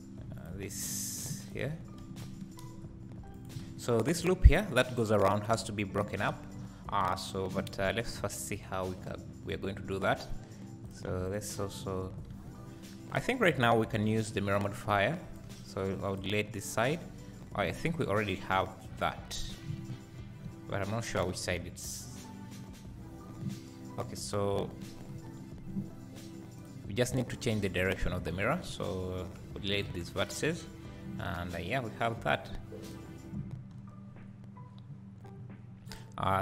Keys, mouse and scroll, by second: 0.4 click, 0.8 click, 1.4 ctrl+click, 3.6 alt+a, 6.2-6.7 scroll down 1, 6.9 `, 8.2 scroll up 1, 10.8 click, 11.3 shift+click, 11.9 scroll down 1, 12.3 alt+a, 14.0 b, 15.4 x, 16.8 Tab, 19.9 ctrl+z, 23.3 Tab, 25.1 KP_1, 26.6 click, 27.7 click, 28.5 Tab, 29.4 x, 30.6 Tab, 32.9 click, 33.6 Tab, 34.1 scroll up 2, 34.7-35.9 scroll down 2, 35.9 click.